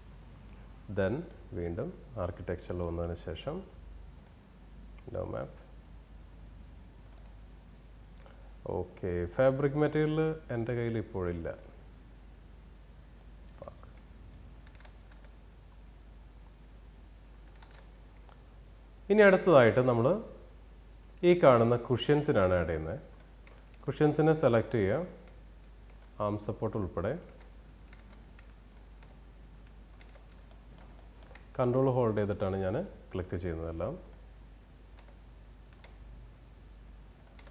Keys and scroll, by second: 14.3 ctrl+z, 17.0 ctrl+z, 27.4 ctrl+z.